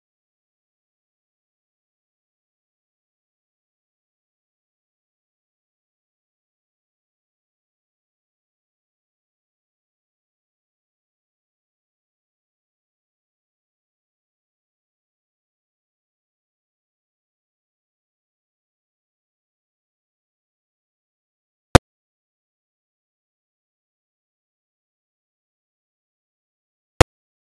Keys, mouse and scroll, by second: 0.5 Tab, 1.1-1.4 middle drag, 1.4 scroll down 1, 1.6 middle click, 2.0 KP_0, 3.0 click, 4.1 KP_Divide, 4.6 KP_0, 5.5-6.6 drag, 6.6 Tab, 7.0 a, 7.6 u, 9.2 scroll down 1, 9.3 a, 9.7 r, 11.1 s, 13.4 Tab, 13.6 scroll up 5, 13.9-14.6 shift+middle drag, 14.6-15.0 scroll down 3, 15.0-15.4 shift+middle drag, 15.4 scroll up 1, 15.6-16.0 shift+middle drag, 16.0 scroll up 5, 16.2-17.2 shift+middle drag, 17.2 scroll down 3, 17.5 shift+middle drag, 17.8 click, 18.4 shift+l, 19.4-21.5 shift+drag, 21.5 ctrl+j, 21.7 Tab, 22.0 a, 22.5 alt+j, 22.8 u, 24.0 scroll up 2, 24.5 a, 25.2 r, 25.9 Tab, 26.2-27.3 shift+middle drag, 27.3-27.5 scroll down 4.